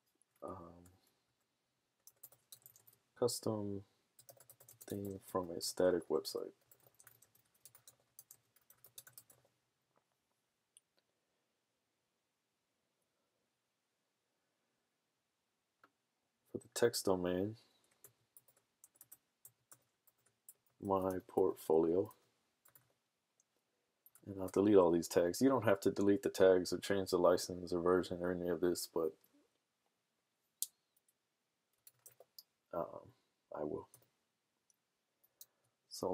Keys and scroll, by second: 1.3-9.7 typing, 18.0-19.0 typing, 20.4-22.7 typing, 33.5-34.2 typing.